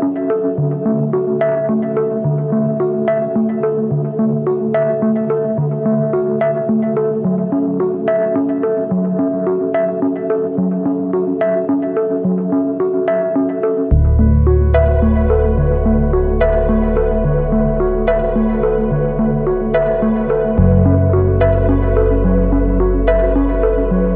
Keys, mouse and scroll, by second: 1.1 ctrl+d.